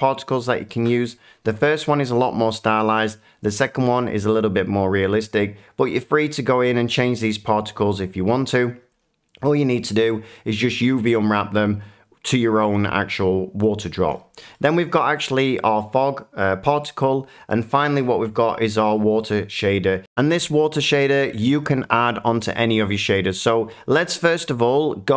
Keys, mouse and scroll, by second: 0.7 shift+middle click, 8.4 middle click, 8.9 click, 9.9 middle click, 11.6 middle click, 14.1 middle click, 14.5 shift+middle click, 14.8 click, 17.7 click.